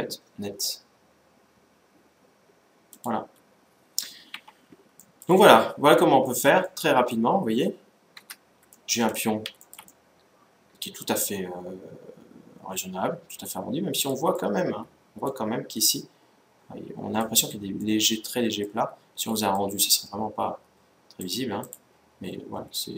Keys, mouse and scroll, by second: 3.2-4.8 scroll down 1, 4.8-7.9 middle drag, 8.0 Tab, 8.2 middle click, 8.5-11.2 middle drag, 11.5 middle click, 14.1-16.7 middle drag, 17.5-20.7 middle drag, 20.9-22.9 drag, 22.5-22.9 middle drag.